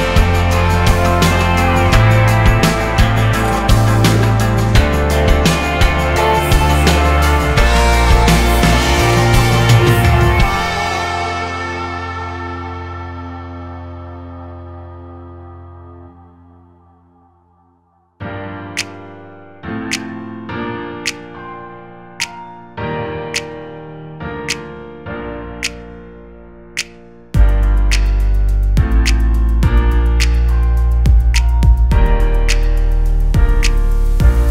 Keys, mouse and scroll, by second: 1.0 click, 1.6 click, 3.2 click, 4.5 click, 5.1 click, 5.4-5.9 scroll down 1, 6.3-7.7 drag, 8.1-8.5 drag, 8.7-12.5 drag, 13.1 click, 13.5 click, 16.8-17.3 scroll down 2, 17.3 click, 21.5 click, 22.0 scroll down 3, 22.5 click, 24.3-24.9 scroll down 2, 25.0 scroll up 1, 25.7-26.2 scroll down 1, 26.2-30.2 drag, 30.2-32.2 drag, 32.7-34.5 drag.